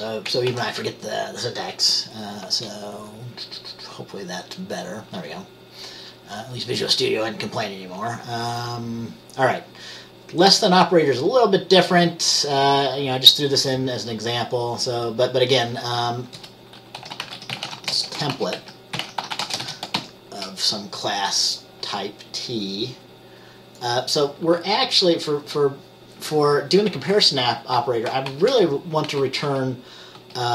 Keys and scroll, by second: 0.6 ctrl+s, 16.5 Return, 17.1-20.1 typing, 28.4-30.5 typing.